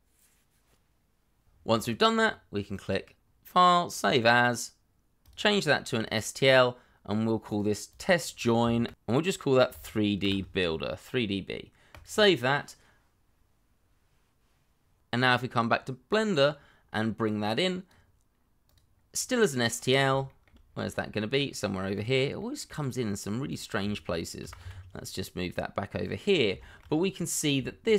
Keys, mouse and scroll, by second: 7.9 double click, 8.8 shift+-, 9.9 3, 10.1 shift+d, 11.2 shift+b, 19.4-20.0 scroll down 1, 20.2 shift+middle click, 20.6-21.5 scroll down 1, 21.5 middle click, 24.4 g, 24.6 y, 26.2 Up, 26.6 shift+middle click, 26.8 scroll up 1, 27.1 middle click, 27.6 shift+middle click, 27.8-27.9 shift+scroll up 1.